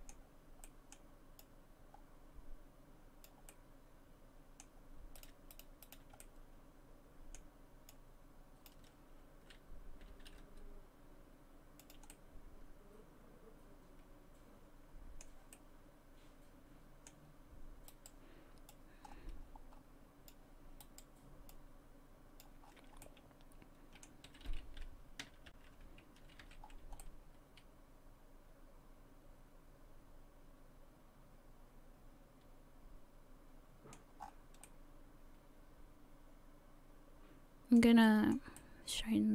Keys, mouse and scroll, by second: 0.7 middle click, 1.4 click, 3.5 middle click, 5.2 right click, 5.5 shift+right click, 5.9 shift+right click, 6.2 middle click, 7.9 click, 10.0 r, 12.1 middle click, 15.5 middle click, 17.9 right click, 18.7 click, 20.8 right click, 21.5 click, 22.6-23.0 scroll down 5, 23.0 middle click, 24.3 a, 24.5 a, 25.6 alt+h, 26.2 a, 26.4 a, 26.6-27.0 scroll down 4, 27.0 middle click, 32.6 middle click, 34.2 scroll up 5, 34.6 middle click, 38.2 shift+middle click, 38.6 middle click.